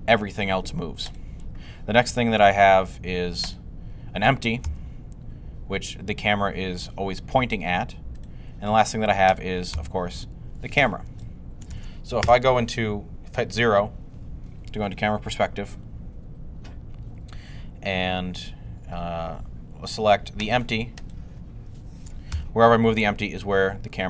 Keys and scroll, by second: 4.5 g, 9.6 g, 12.1 0, 14.3-15.1 typing, 22.1 g.